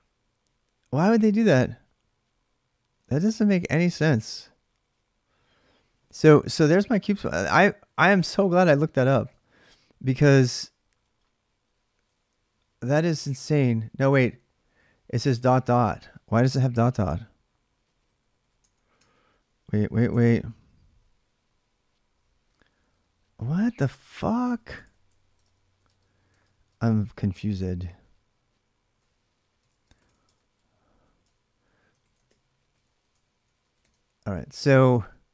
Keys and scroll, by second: 33.0-34.1 typing.